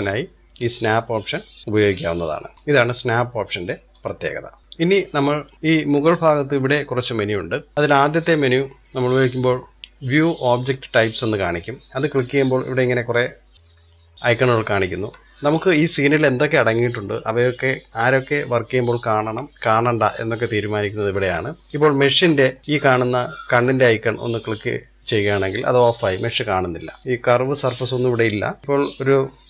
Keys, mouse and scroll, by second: 0.7-2.9 drag, 11.5-14.2 drag.